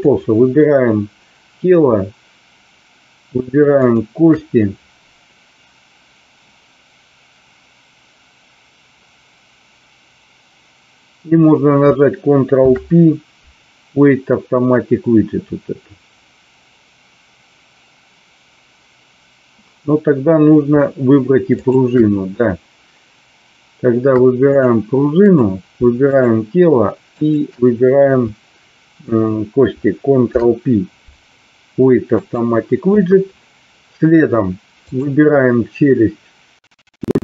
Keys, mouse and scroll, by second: 0.1 click, 3.6 shift+click, 12.5 ctrl+p, 21.6 shift+click, 25.3 click, 26.1 shift+click, 30.1 ctrl+p.